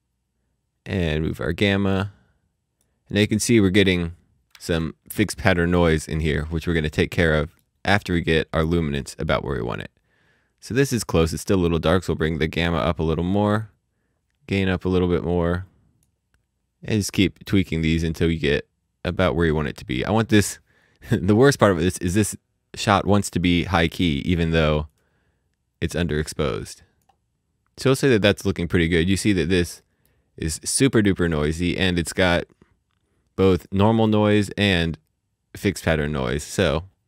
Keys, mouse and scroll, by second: 1.2 click, 3.0-3.5 scroll up 1, 4.9 middle click, 7.2 middle click, 8.2-9.5 scroll, 9.5-9.9 scroll up 1, 9.9-11.1 scroll down 1, 12.2 click, 16.5 click, 20.3 click, 21.6-22.0 scroll up 1, 22.0-22.5 scroll down 1, 22.6-25.1 scroll up 1, 25.5-26.5 scroll up 1, 27.3-28.0 scroll down 1, 28.0-29.8 scroll up 1, 29.8 middle click, 33.5 middle click, 33.8 space, 36.4 space, 36.8-37.0 scroll down 1.